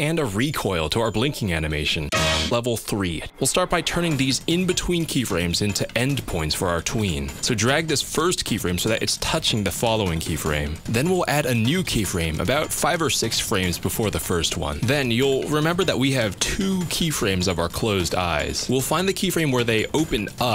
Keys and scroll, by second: 12.2 F6.